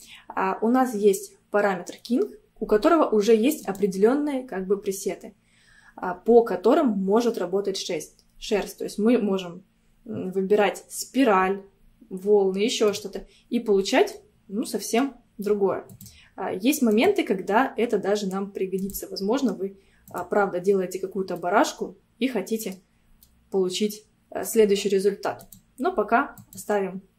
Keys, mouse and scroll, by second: 3.6-6.8 drag, 13.9 scroll down 2, 14.2-15.9 middle drag, 15.9-18.0 drag, 18.0-18.7 scroll up 2, 18.8-21.4 drag, 21.4-23.1 middle drag, 23.1 scroll down 1, 23.3-25.4 middle drag, 25.4-27.1 drag.